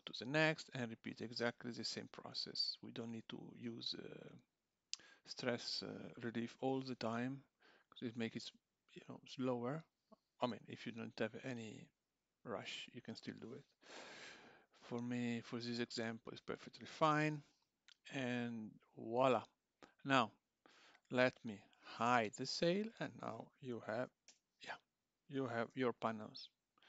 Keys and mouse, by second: 1.7 click, 5.8 click, 6.5 l, 7.9 click, 10.5 l, 11.8 click, 13.9 l, 15.3 click, 16.6 click, 17.2 l, 18.6 click, 20.8 Tab, 21.2 click, 22.1 h, 23.7 `, 25.3 click, 25.7 g.